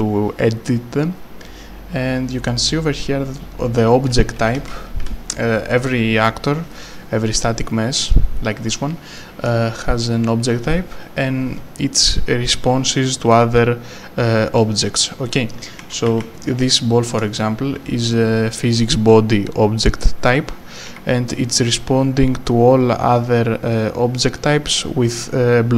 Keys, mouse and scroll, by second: 4.4 a, 5.1-5.8 scroll, 5.8 v, 8.4-8.9 scroll down 1, 9.5 right click, 9.8-10.2 scroll up 1, 10.2 scroll down 1, 15.6-16.7 typing, 17.2-20.1 scroll up 1, 21.3 a.